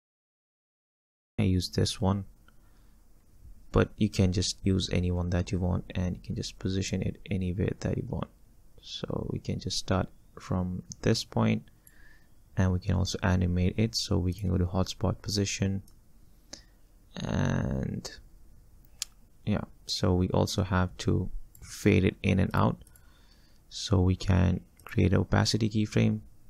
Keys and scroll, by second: 0.1 Down, 0.2-1.1 Down.